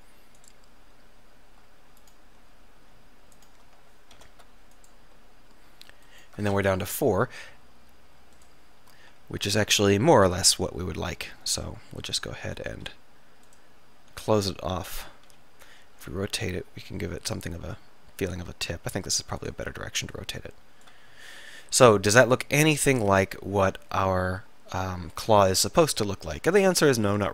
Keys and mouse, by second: 2.6-4.2 middle drag, 4.2 alt+m, 6.2 click, 6.8 KP_3, 7.0 click, 7.6 s, 9.2 e, 12.2 click, 12.8 s, 15.4 f, 16.1 r, 22.0-24.2 middle drag, 25.2 middle click, 27.0 click.